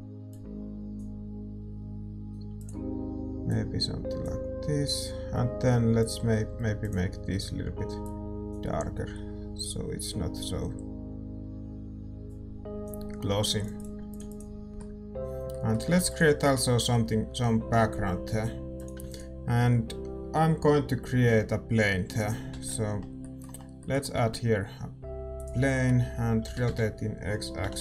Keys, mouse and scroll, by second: 6.1-8.5 drag, 13.7-23.2 drag, 14.7 ctrl+s, 15.1-18.7 middle drag, 18.7 ctrl+s, 23.1 middle click, 23.1 shift+z, 23.5 click, 23.9-27.6 middle drag, 25.7 shift+a, 27.6 r.